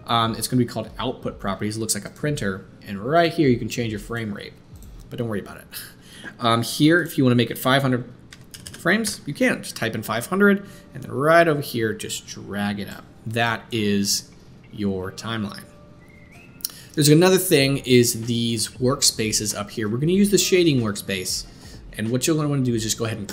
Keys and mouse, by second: 2.1-3.2 middle drag, 3.2 click, 4.1-4.7 middle drag, 4.7 click, 4.9-6.9 middle drag, 6.9-23.3 drag, 8.6 KP_0.